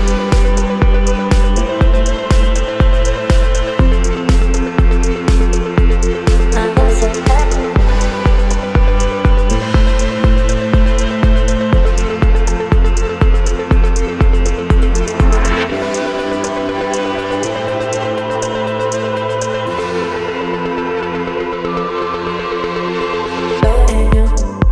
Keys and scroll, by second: 0.7 v, 8.4 Return.